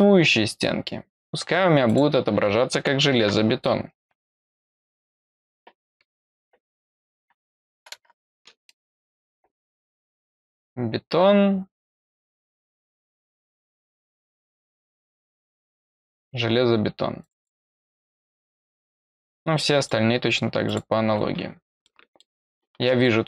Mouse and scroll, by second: 1.8 click, 9.7-10.3 scroll down 1, 12.5-13.7 scroll down 3, 14.0 scroll up 1, 14.5-15.8 scroll down 1, 15.8-17.2 scroll up 1, 17.2 click, 17.3 click, 19.7 click, 20.6 click, 21.8 middle click, 23.0 middle click.